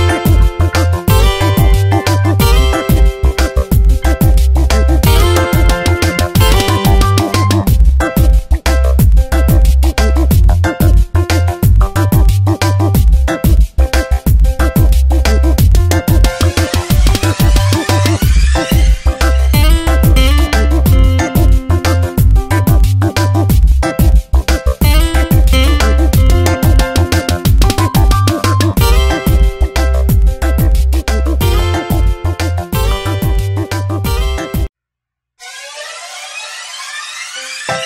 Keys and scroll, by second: 1.9 ctrl+z, 8.4 space, 14.3 ctrl+Return, 15.0 v, 17.7 ctrl+z, 18.9 ctrl+j, 19.5 v, 26.1 ctrl+t, 28.6 Return, 30.7 ctrl+shift+[, 31.4 ctrl+].